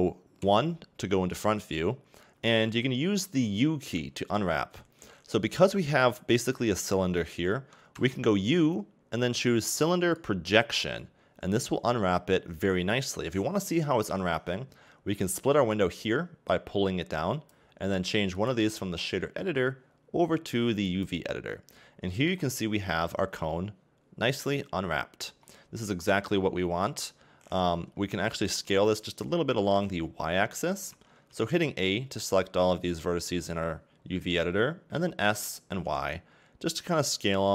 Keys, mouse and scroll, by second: 0.4 KP_1, 10.6 u, 16.2 click, 21.0 click, 28.0 a, 28.7 s, 31.3 a, 31.5 a, 32.7 a, 35.3 s.